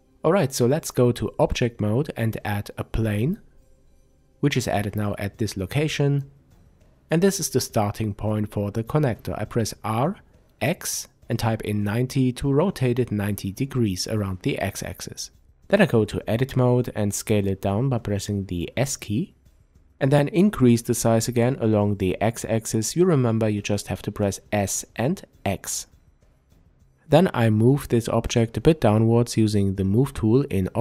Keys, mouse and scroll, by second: 0.3-20.0 middle drag, 1.9 shift+a, 7.6 r, 12.7 Return, 13.9 Tab, 16.5 s, 20.0 click, 20.8 s, 23.4 click, 24.4-29.5 middle drag, 27.6 Tab, 29.5-30.8 drag.